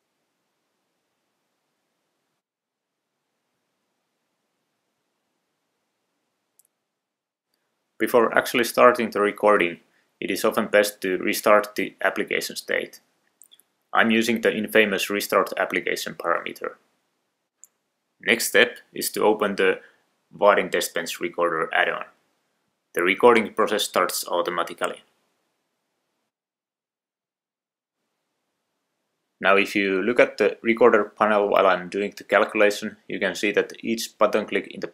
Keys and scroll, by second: 11.6 Return.